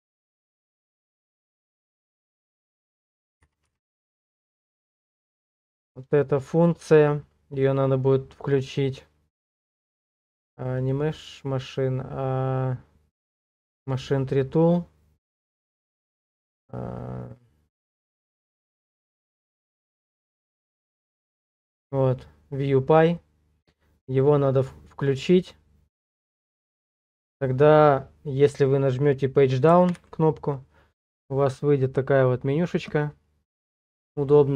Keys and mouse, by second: 29.9 Page_Down.